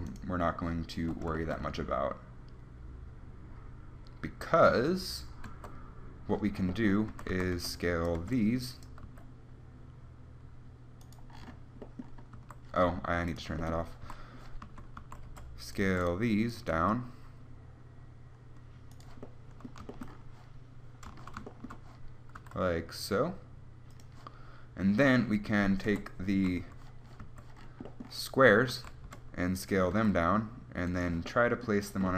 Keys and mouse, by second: 5.7 Tab, 7.3-9.3 typing, 7.9-11.0 drag, 12.5 a, 13.5-14.5 drag, 14.3 a, 14.6 click, 15.5 b, 15.6-16.7 drag, 16.9 s, 22.5 s, 24.4 click, 26.1 KP_1, 26.8 a, 27.4 a, 29.3 b, 30.1 s.